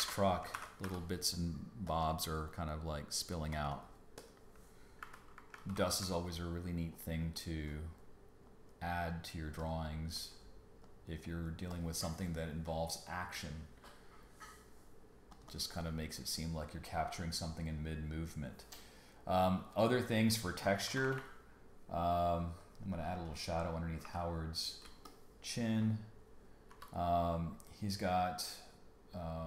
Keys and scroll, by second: 0.0 alt+BackSpace, 0.5 super+d, 0.8 b, 5.5 super+space, 5.6 super+-, 20.8 super+=, 24.0 g, 24.8 space, 25.9 space, 26.7 b.